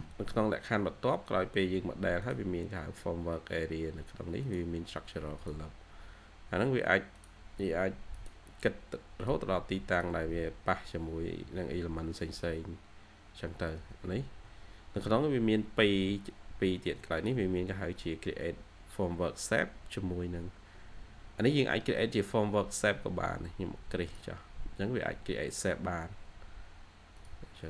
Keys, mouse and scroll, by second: 16.2 ctrl+q.